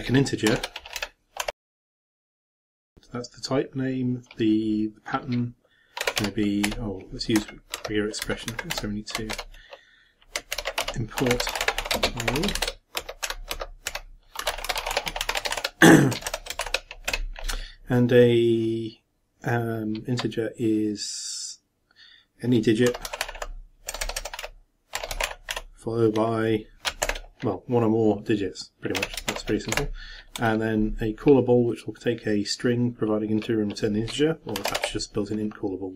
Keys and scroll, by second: 0.2-2.3 typing, 9.3 ctrl+,, 10.5 ctrl+m, 10.8 ctrl+a, 11.3 ctrl+m, 11.5 ctrl+p, 11.6 ctrl+o, 11.6 ctrl+r, 11.8 ctrl+t, 12.0 ctrl+space, 12.2 ctrl+r, 12.3 ctrl+e, 12.5 ctrl+shift+Return, 13.0 ctrl+shift+Down, 13.3 ctrl+shift+End, 13.5 ctrl+shift+Down, 13.9 ctrl+shift+End, 14.4 ctrl+shift+c, 15.2-17.1 typing, 27.0 shift+=, 29.3 shift+0, 29.7 shift+,.